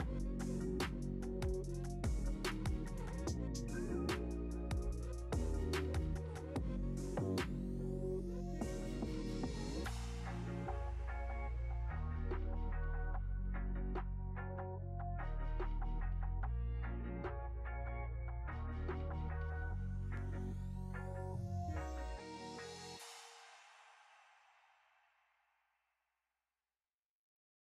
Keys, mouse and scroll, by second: 0.1 middle click, 0.7 scroll down 1, 1.0-1.8 middle drag, 1.8 scroll down 1, 2.1-2.4 middle drag, 2.4 click, 2.7-3.1 scroll down 1, 3.1-4.0 scroll up 1, 4.0 s, 8.3 scroll down 3, 8.5-9.9 scroll up 1, 9.9 alt+a, 10.1 click, 11.5-12.3 drag, 12.3-13.3 scroll up 1, 13.3-13.7 scroll down 1, 13.7-15.5 middle drag, 15.5 x, 16.1-16.4 scroll up 1, 16.4-17.1 middle drag, 17.1 click, 17.4-17.8 scroll up 2, 17.8-18.6 middle drag, 18.6-18.9 scroll down 3, 18.9-21.4 middle drag, 21.4 KP_3, 24.0 r.